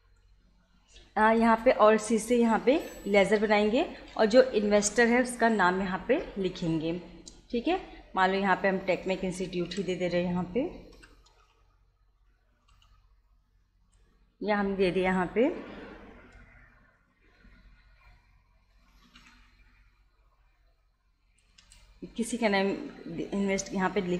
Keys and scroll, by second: 2.7 alt+c, 8.6-12.3 typing, 18.9 shift+t, 19.2 shift+e, 21.4 BackSpace.